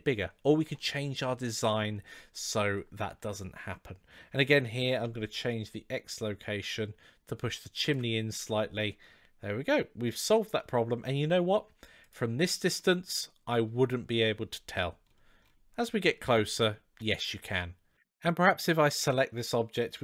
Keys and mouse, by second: 5.3-7.8 shift+drag, 8.4-9.9 middle drag, 11.8 click, 12.6-13.5 middle drag, 16.2-17.3 middle drag, 18.0 click.